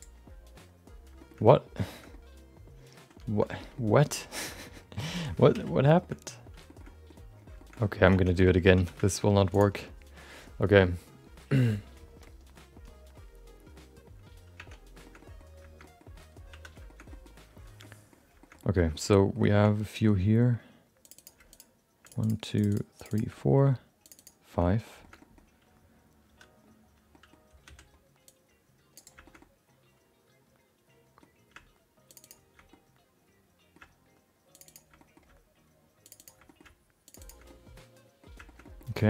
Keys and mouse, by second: 1.2 shift+middle click, 1.4 middle click, 2.1 middle click, 3.5 middle click, 3.8 shift+middle click, 4.0 middle click, 4.4 shift+middle click, 4.7 middle click, 5.5 alt+z, 6.6 shift+middle click, 6.9 middle click, 7.6 shift+middle click, 8.4 Tab, 8.4 middle click, 9.0 x, 9.0 shift+middle click, 9.2 middle click, 9.5 click, 14.6 Tab, 15.0 middle click, 15.2 middle click, 15.8 middle click, 16.5 3, 16.8 shift+middle click, 17.1 middle click, 17.8 middle click, 18.4 shift+middle click, 18.6 middle click, 18.9 shift+middle click, 19.1 middle click, 19.4 shift+middle click, 21.0 click, 21.5 shift+click, 22.2 shift+click, 23.3 middle click, 24.0 shift+click, 24.5 shift+middle click, 24.7 middle click, 25.0 shift+middle click, 25.2 middle click, 26.2 3, 27.1 middle click, 27.6 c, 29.2 shift+middle click, 29.4-31.2 middle drag, 32.1 shift+click, 32.2 shift+click, 32.7-33.7 middle drag, 34.5 shift+click, 34.6 shift+click, 34.9 middle click, 36.0 shift+click, 36.4 middle click, 37.1 shift+click, 37.4 middle click, 38.4 shift+middle click, 38.6 middle click.